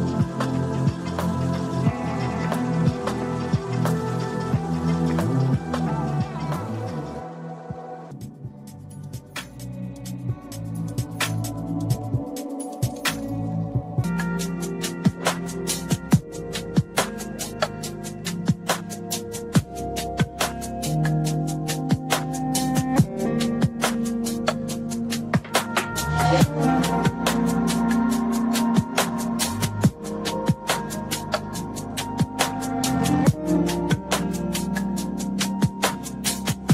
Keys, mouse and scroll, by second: 2.0 alt+shift+click, 3.1 click, 3.9 alt+click, 5.2 click, 7.1 KP_1, 10.9 click, 13.0-13.9 scroll down 1, 22.4-23.3 drag, 24.3-27.7 drag, 29.0 click, 34.3 click, 36.4-36.7 drag.